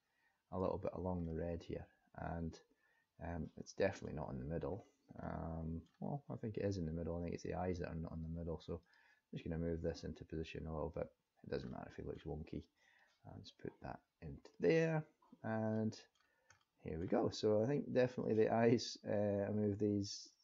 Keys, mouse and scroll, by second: 1.2 middle click, 4.7-5.3 scroll down 1, 5.3 middle click, 5.3 scroll down 1, 8.8 click, 10.0 click, 11.7 middle click, 12.9 click, 15.7 middle click, 16.2-16.6 scroll down 2, 16.6 middle click, 17.1 scroll up 1, 18.2 click, 19.1 click.